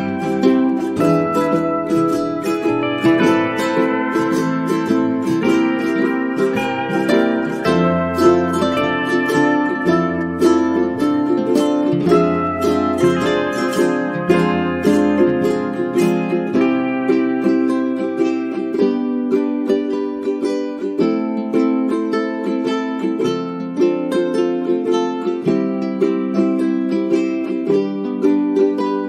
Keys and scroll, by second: 16.8 space, 24.3 space.